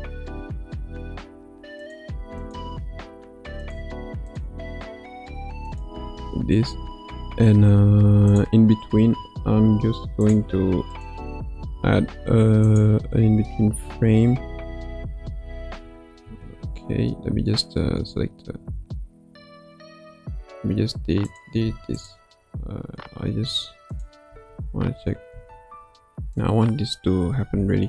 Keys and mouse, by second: 0.7 r, 2.5 click, 3.1 r, 4.2 click, 4.8 r, 8.3 click, 9.1 shift+d, 10.9 click, 16.4 ctrl+z, 17.8 Tab, 19.4 Tab, 21.2 click, 21.6 x, 24.0-24.3 drag, 24.3 space, 25.3 space, 26.3-27.8 drag.